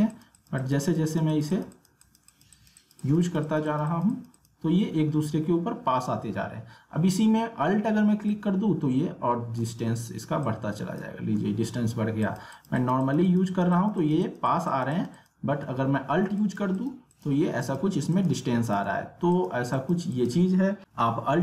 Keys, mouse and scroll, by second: 8.0 click, 8.3-12.2 drag.